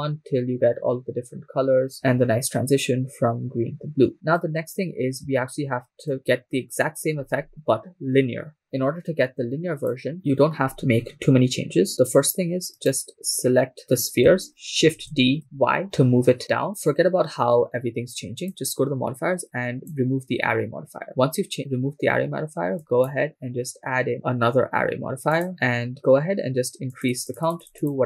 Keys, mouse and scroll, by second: 6.1-7.2 drag, 7.2 shift+space, 9.9 click, 10.9-11.6 scroll down 4, 13.2 right click, 15.3 shift+d, 15.5 y, 18.4 click, 19.8-21.1 drag, 22.8-25.5 drag, 26.9-28.0 drag.